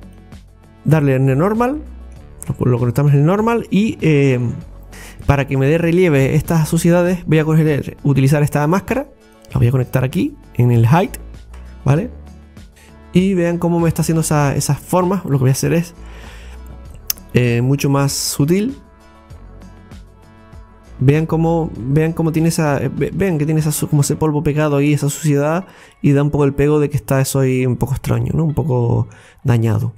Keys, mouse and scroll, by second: 0.0 scroll up 6, 0.2-1.5 drag, 1.5 scroll down 1, 4.8 click, 5.0 click, 11.2 click, 12.7 scroll up 3, 12.8-16.6 middle drag, 16.6 click, 17.1-20.0 drag, 20.9-24.7 middle drag, 24.7-25.1 scroll up 1, 25.1-28.2 middle drag, 29.4-29.9 scroll down 2, 29.9 middle click.